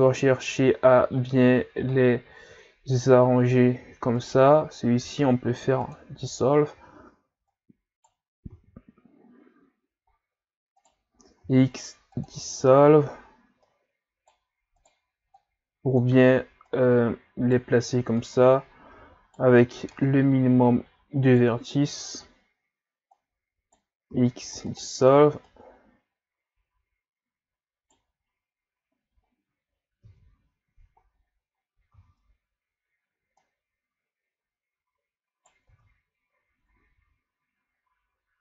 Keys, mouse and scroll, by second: 0.1-0.6 ctrl+scroll up 1, 0.6 shift+scroll up 3, 2.0 shift+scroll up 2, 4.2 right click, 5.0 x, 7.5 right click, 8.5 ctrl+z, 10.1-10.8 shift+scroll down 3, 10.8 right click, 11.4 x, 13.6 right click, 14.8 right click, 15.4-16.7 drag, 16.7 right click, 18.2 right click, 19.9 right click, 22.0-23.1 shift+scroll up 2, 23.1 right click, 24.1 x, 25.5 right click, 30.1 Tab, 30.7 a, 31.1-31.6 scroll down 2, 31.6 scroll up 1, 31.9 Tab, 32.6 scroll up 1, 33.4 Right, 35.7 Tab.